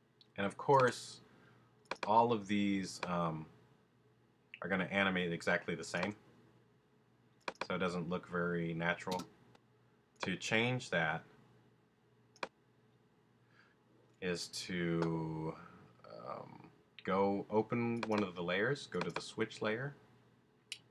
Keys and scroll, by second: 9.1 space.